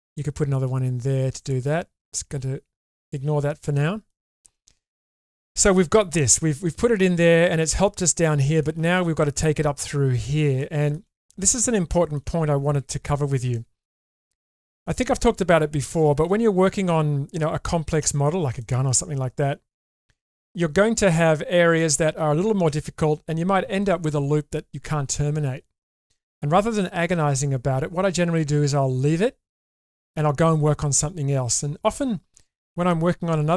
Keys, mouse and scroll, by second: 2.3 ctrl+z, 2.8 middle click, 3.4 shift+middle click, 3.7 middle click, 4.3 shift+middle click, 4.6 middle click, 7.3 middle click, 8.6 shift+middle click, 10.6 shift+middle click, 11.2 middle click, 11.7 shift+middle click, 13.5 middle click, 18.6 middle click, 19.7 shift+middle click, 21.0 middle click.